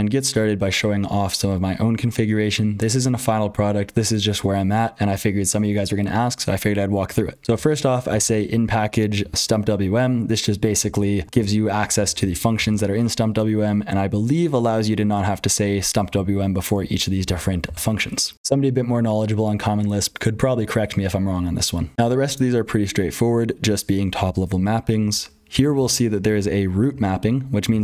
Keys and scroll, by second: 0.0-27.8 typing, 7.4 F12, 9.1 ctrl+[, 18.3 F12, 21.9 super+h, 21.9 ctrl+o, 21.9 ctrl+l, 21.9 F12.